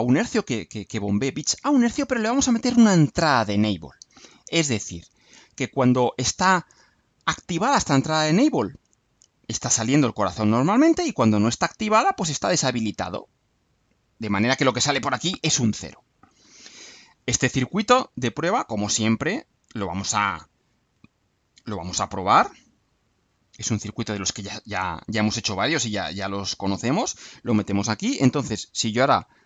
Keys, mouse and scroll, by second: 18.3 click, 20.0 click, 21.4 ctrl+u, 24.4 click, 25.7-27.2 drag.